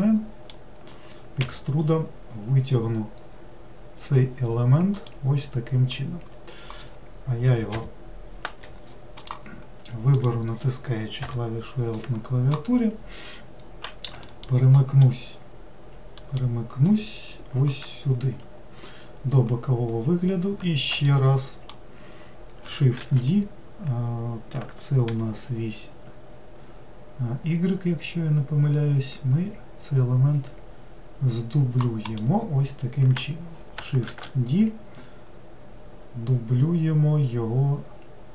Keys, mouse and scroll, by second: 1.4 e, 9.2 click, 10.1 click, 11.3 l, 14.2 alt+middle click, 14.8 alt+middle click, 16.2 alt+middle click, 19.9-21.1 scroll up 2, 21.1-23.0 shift+middle drag, 23.0 shift+d, 34.1 shift+d.